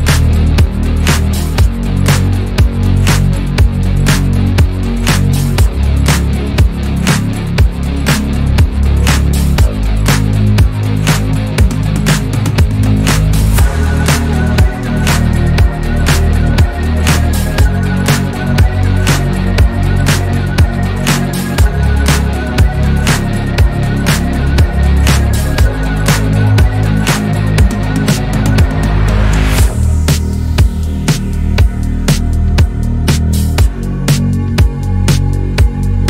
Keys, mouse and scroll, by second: 1.1 shift+d, 2.3 click, 4.2 alt+z, 4.7 middle click, 5.5-6.5 scroll down 6, 6.5 click, 6.9-9.2 middle drag, 13.5-14.3 scroll down 10, 14.3-14.8 middle drag, 14.8 drag, 15.1-15.5 scroll down 3, 15.5-16.5 middle drag, 16.5-17.2 scroll up 6, 17.2-19.0 shift+middle drag, 19.0 scroll up 1, 19.2 scroll down 2, 19.6-21.4 shift+middle drag, 21.4 click, 22.4 Tab, 27.3 KP_1, 28.6 shift+middle click, 29.3-29.8 scroll up 2, 29.9-30.4 scroll up 3, 30.4 shift+middle click, 31.0-31.8 scroll up 2, 31.8 Tab, 32.5 Tab, 33.7 Tab, 34.3 1, 34.7 click, 35.7 KP_Decimal.